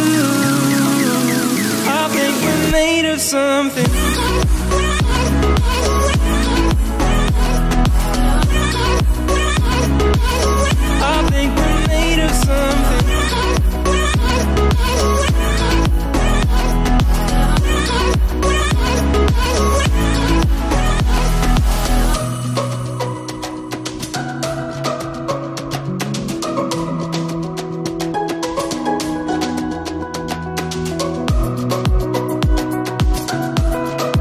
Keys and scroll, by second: 17.4 ctrl+i.